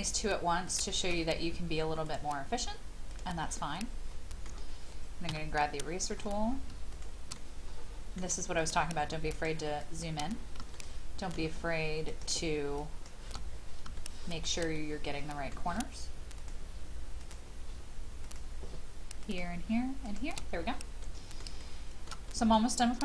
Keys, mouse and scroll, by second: 0.6 shift+click, 2.0 click, 3.7 middle click, 5.3 e, 5.8-6.6 scroll up 1, 6.9 shift+click, 7.3 middle click, 8.5 shift+click, 9.3 shift+click, 10.3-10.6 scroll down 1, 10.7 shift+middle click, 12.1 shift+click, 12.8 shift+click, 13.4-13.8 scroll down 1, 14.0 shift+middle click, 14.7 middle click, 16.4 shift+click, 17.2 shift+click, 18.2 shift+click, 19.2 shift+click, 20.0 shift+click, 20.5-21.0 scroll down 1, 21.0 middle click, 21.6 shift+middle click, 22.3 middle click.